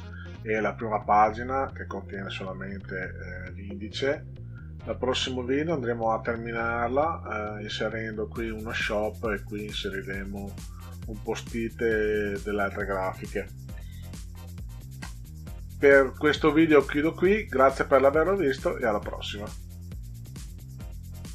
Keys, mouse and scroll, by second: 16.4 drag, 21.2 click.